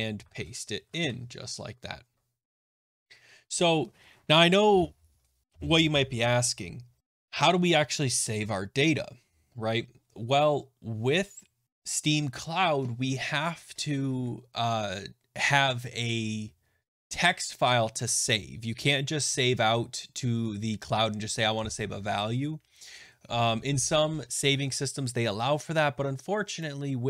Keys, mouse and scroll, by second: 0.0-1.3 typing.